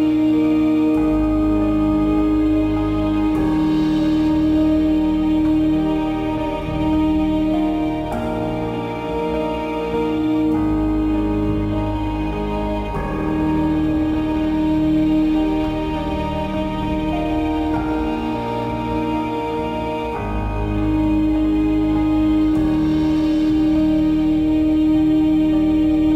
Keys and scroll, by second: 4.5 ctrl+d, 9.9 9.